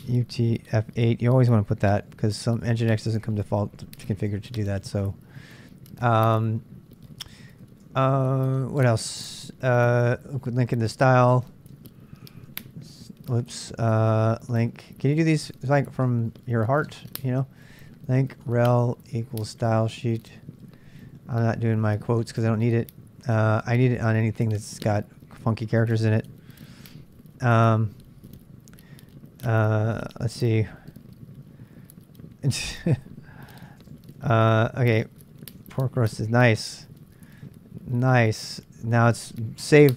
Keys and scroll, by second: 0.0-1.9 typing, 2.9-8.0 typing, 7.0 ctrl+[, 7.1 ctrl+j, 7.9 ctrl+[, 9.5-16.8 typing, 18.0-22.2 typing, 26.0-28.4 typing, 29.8 typing, 33.0-38.8 typing, 33.7 ctrl+[.